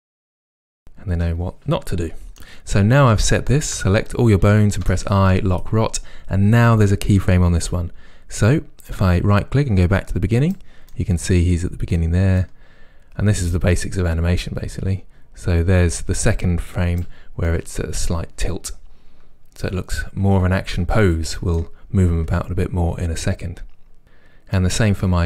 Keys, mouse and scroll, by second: 3.8 a, 4.9 i, 9.0 right click, 10.9-12.5 middle drag, 12.5-17.5 right drag, 17.5-24.6 middle drag, 24.6-25.2 right drag.